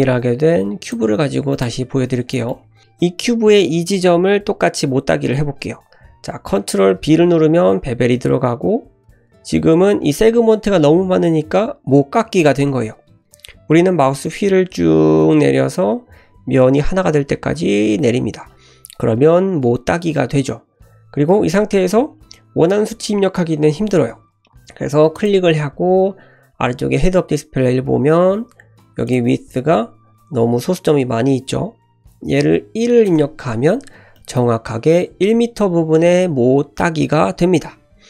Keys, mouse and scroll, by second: 1.1-1.6 scroll up 2, 1.5 shift+middle click, 1.8 `, 2.3 shift+drag, 2.5 shift+middle click, 2.5 scroll up 1, 6.9 ctrl+b, 29.1-33.5 drag, 34.1 middle drag.